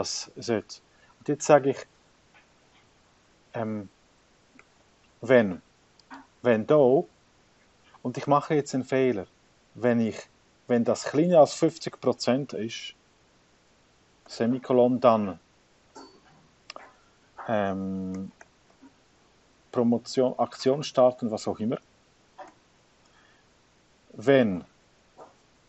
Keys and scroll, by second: 0.0-5.2 typing, 21.8 shift+9, 24.4-25.6 typing.